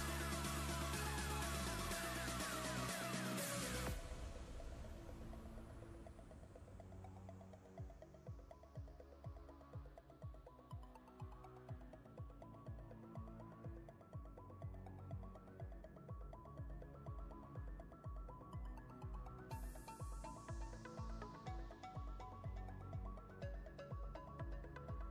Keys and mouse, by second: 1.0-5.4 click, 8.8 shift+click, 10.8 click, 15.4-16.3 alt+click, 17.0-18.4 ctrl+click, 17.5 ctrl+space, 18.4 click, 18.8 space, 19.6 click, 20.1 ctrl+space, 20.6-21.5 ctrl+click, 20.6 ctrl+space, 21.9 ctrl+click, 22.6-23.7 ctrl+space, 23.8 click, 24.5-25.1 space.